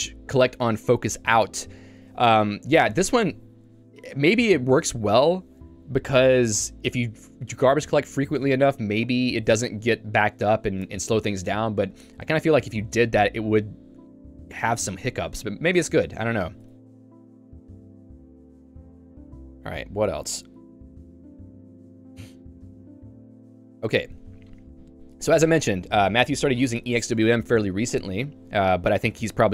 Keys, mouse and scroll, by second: 0.9 j, 16.7 Escape, 16.8 j, 28.5 k, 29.0 j.